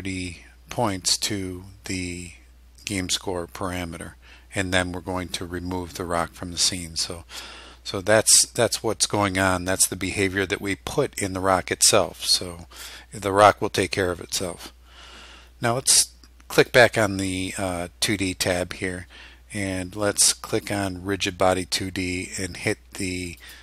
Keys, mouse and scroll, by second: 16.7 click, 20.6 click, 23.5 click.